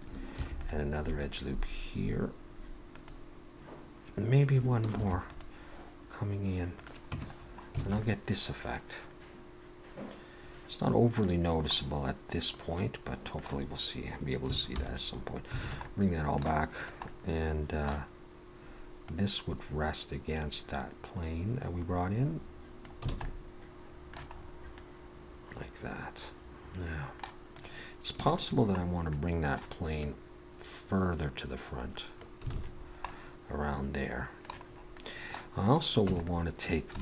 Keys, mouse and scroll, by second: 0.3 ctrl+r, 5.0 ctrl+r, 7.1 Tab, 7.3-7.9 scroll down 4, 7.9 alt+a, 8.0 middle click, 11.4-11.8 scroll down 1, 11.8 middle click, 13.6-14.3 scroll down 1, 14.3 scroll down 1, 14.8 alt+h, 15.6 alt+a, 15.8 middle click, 16.8 click, 17.1 middle click, 19.1 click, 23.1 alt+a, 23.2 middle click, 24.4-25.3 scroll up 2, 24.8 middle click, 27.5 click, 28.2 shift+click, 28.8-29.1 scroll down 2, 29.1 middle click, 30.0 click, 32.5 alt+a, 32.8-33.5 scroll down 3, 33.5 middle click, 34.7-35.0 scroll up 2, 34.9 middle click, 35.6 click, 36.1 Tab, 36.3 middle click.